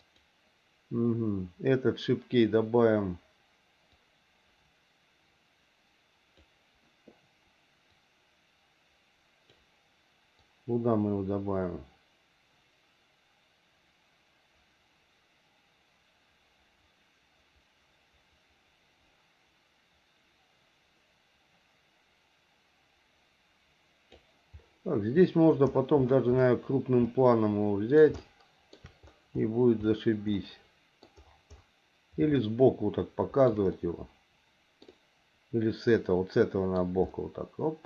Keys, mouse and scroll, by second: 3.9-6.4 drag, 8.0-9.5 drag, 10.5-24.2 drag, 27.0 middle click, 28.2 shift+middle click, 30.4 middle click, 32.4-33.5 shift+middle drag, 33.7-36.7 middle drag, 37.0 middle click.